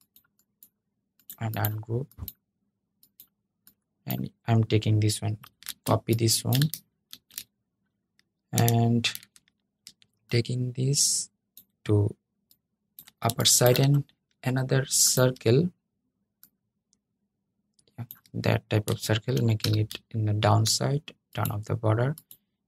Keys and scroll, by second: 5.2 super+c, 6.8 super+v, 19.3 super+{.